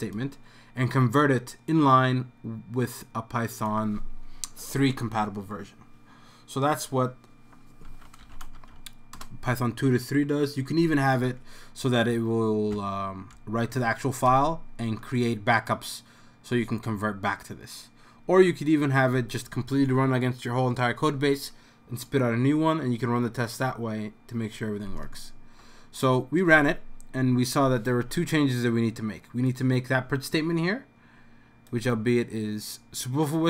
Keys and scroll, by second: 7.6-9.2 typing, 12.1 Up, 12.7 Up, 13.3 Left, 13.8 Left, 14.3 BackSpace, 14.8 w, 14.9 Right, 15.2 Right, 15.4 Right, 15.4 Right, 25.6-26.2 BackSpace.